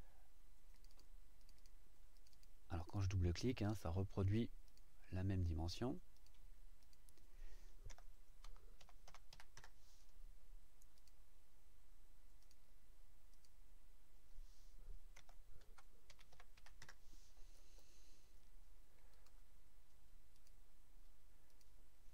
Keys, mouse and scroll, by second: 0.7 click, 1.4 click, 2.1 click, 2.8 click, 3.5 click, 4.7 click, 6.1 click, 6.8 click, 7.9-9.3 typing, 9.6 KP_Enter, 11.0 click, 12.4 click, 13.3 click, 15.2-16.5 typing, 16.8 KP_Enter, 19.1 click, 20.3 click, 21.5 click.